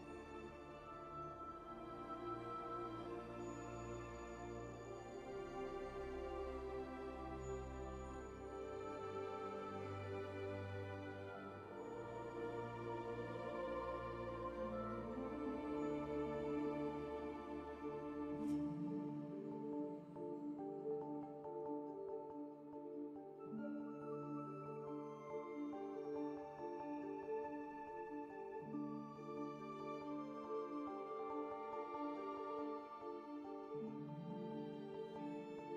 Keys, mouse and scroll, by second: 0.9 F4, 1.9 4, 4.1 space, 4.7 1, 5.1 alt+c, 7.2 alt+c, 9.0 2, 9.3 q, 10.6-15.1 typing, 16.7 2, 17.3 w, 17.5 space, 18.8 2, 19.3 space, 19.5 4, 19.9 q, 21.2 1, 21.4 -, 21.8 4, 23.9-25.6 typing, 26.2 F4, 27.7 F4, 28.7 4, 31.0 z, 31.5 w, 32.3 w, 33.5 r, 34.3 q, 34.7 F4.